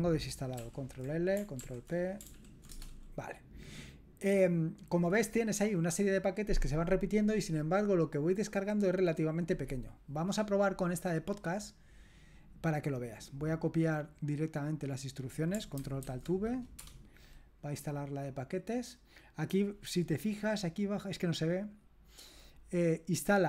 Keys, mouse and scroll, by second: 0.6 ctrl+l, 1.6 ctrl+p, 2.3 ctrl+p, 2.7 Return, 11.3-14.3 scroll down 1, 14.5 click, 15.1 click, 16.0 ctrl+alt+v, 16.8 Return, 20.6-23.4 scroll down 1.